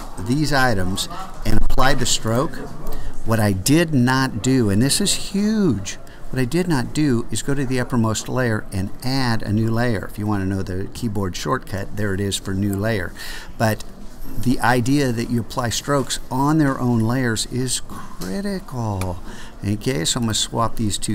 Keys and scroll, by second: 11.0 alt+shift+super+n.